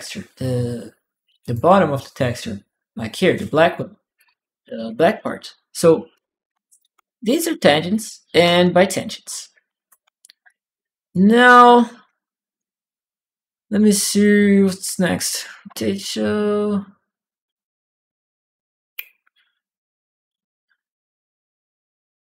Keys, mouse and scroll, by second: 1.2 click, 4.7 click, 5.9 click, 6.3-9.4 typing, 8.2-10.2 right drag, 10.2 click.